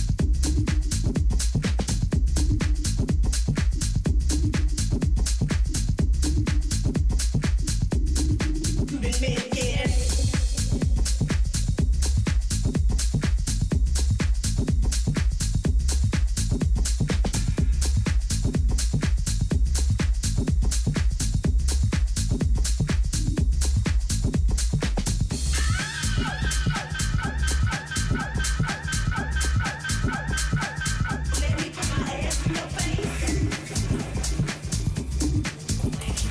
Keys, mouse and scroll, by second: 1.4-3.3 drag, 3.6-6.1 middle drag, 6.1-8.4 drag, 7.3-9.1 middle drag, 12.6-14.4 drag, 15.2-20.8 middle drag, 27.0 Tab, 27.6 a, 28.4-30.8 middle drag, 32.3-34.1 drag, 35.5-36.3 middle drag.